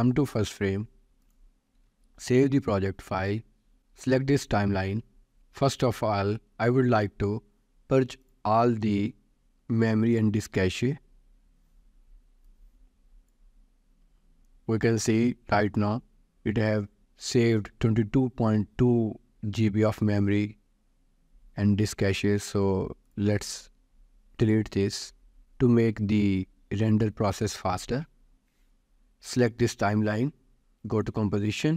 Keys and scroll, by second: 2.3 ctrl+s.